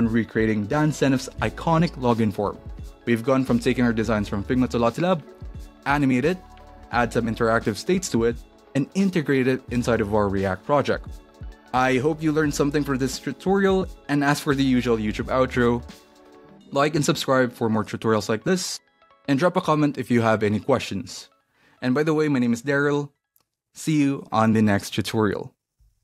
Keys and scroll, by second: 0.6 Tab, 7.4-12.6 typing.